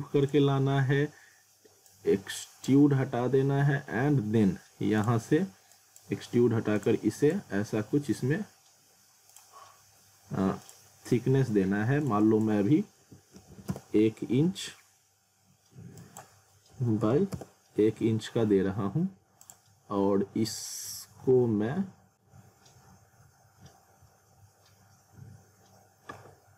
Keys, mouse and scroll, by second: 5.0 click, 10.0 click, 13.7 Return, 16.0 click, 17.3 Return, 19.4 click.